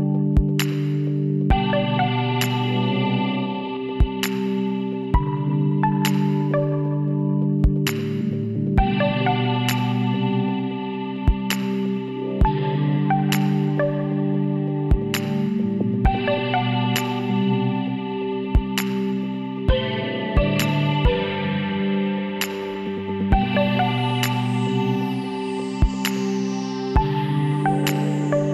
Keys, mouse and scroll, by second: 0.8 Tab, 3.2 shift+a, 6.8-8.4 middle drag, 9.5 x, 10.2 middle click, 11.1 Tab, 11.8 middle click, 13.2 click, 13.7-14.9 middle drag, 14.5 shift+s, 15.1 click, 17.5 shift+s, 19.4 shift+s, 20.4 shift+a, 24.2 middle click, 25.1 s, 27.6 KP_1.